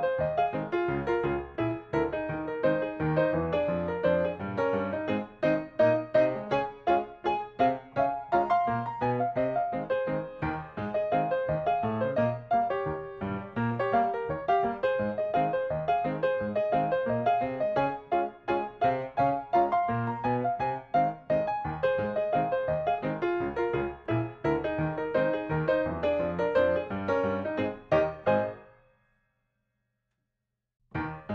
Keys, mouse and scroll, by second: 0.0 space, 0.1 scroll up 1, 0.6 scroll down 1, 0.9 middle click, 1.8-2.3 scroll down 1, 2.7 click, 3.4 g, 3.6 middle click, 4.6-4.9 scroll up 1, 5.1 typing, 5.8 click, 6.2 shift+middle click, 7.0-7.3 scroll up 1, 7.9 click, 8.8 middle click, 9.0 scroll down 1, 9.5 shift+scroll up 1, 9.6 shift+middle click, 10.4 m, 10.8 click, 14.2 shift+middle click, 14.4 scroll up 1, 14.5 scroll down 1, 14.5-15.0 scroll up 1, 15.0 middle click, 16.6 click, 22.4 q, 23.1 click, 24.3 ctrl+click, 26.4 KP_3, 27.8 click, 30.8 click.